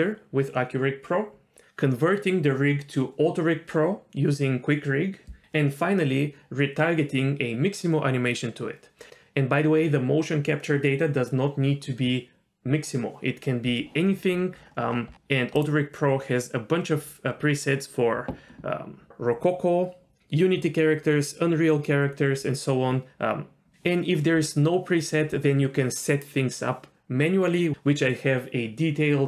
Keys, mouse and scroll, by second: 14.3-15.1 scroll down 4, 14.9 scroll up 1, 15.1-15.5 scroll down 1, 15.5-24.4 drag.